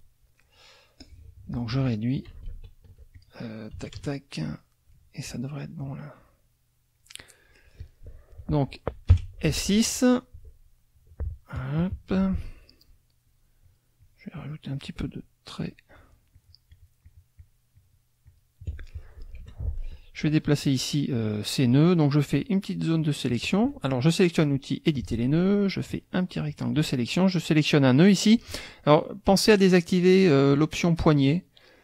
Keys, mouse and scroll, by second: 1.0 click, 2.5 ctrl+shift+z, 3.1 ctrl+click, 4.0 KP_Add, 4.6 click, 5.7-7.2 drag, 9.1 F6, 13.2 shift+click, 13.6 shift+click, 14.0 shift+click, 15.6 shift+click, 15.9-17.7 shift+drag, 18.3 shift+click, 19.4 F2, 20.2 click, 21.4-22.6 drag, 23.0 click, 24.9-27.0 drag, 30.5 click, 31.3 click.